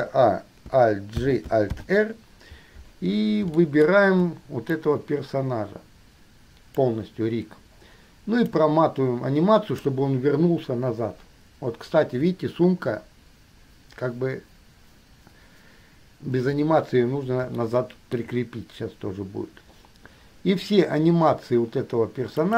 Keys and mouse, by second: 0.0 a, 1.5 alt+g, 1.8 alt+r, 3.7-4.1 shift+middle drag, 5.0-7.1 drag, 8.7-10.1 drag.